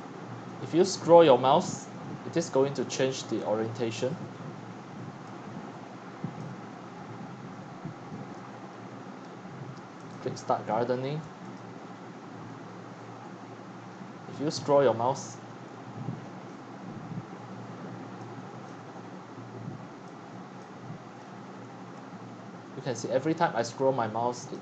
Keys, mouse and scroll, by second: 0.0-4.2 typing, 0.4 click, 1.6-3.1 scroll down 16, 4.1 click, 4.3 click, 4.4 click, 4.4 click, 5.6-12.4 drag, 8.7 middle click, 12.4 middle click, 12.5 click, 13.4-18.7 drag, 21.2-24.6 drag.